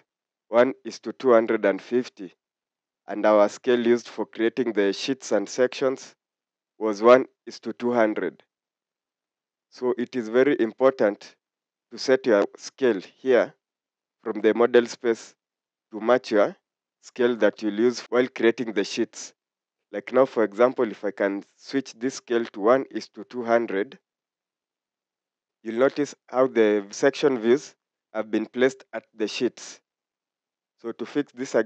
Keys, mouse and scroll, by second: 17.9 scroll up 1, 27.5 scroll up 1.